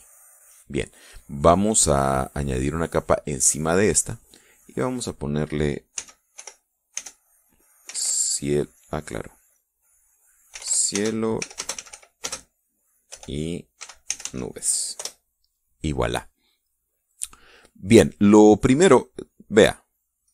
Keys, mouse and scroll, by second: 0.8 click, 2.8 click, 4.1 click, 5.0 click, 6.4 c, 6.8 i, 8.1-8.9 typing, 9.2 click, 10.7-15.1 typing, 15.4 Return, 17.1-18.4 drag, 20.2 click.